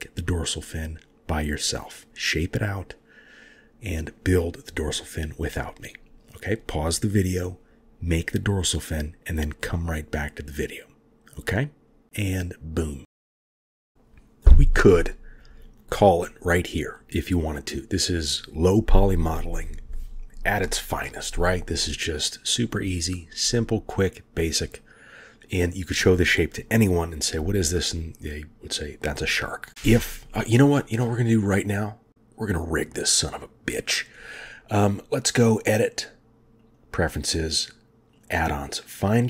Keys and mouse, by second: 0.5 click, 2.6 ctrl+r, 12.8 shift+click, 34.3 click, 35.6-37.0 drag.